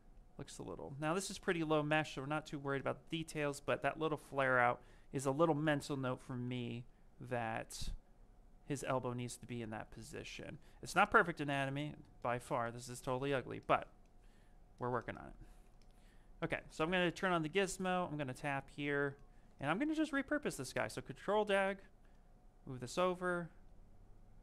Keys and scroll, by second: 6.3 ctrl+z.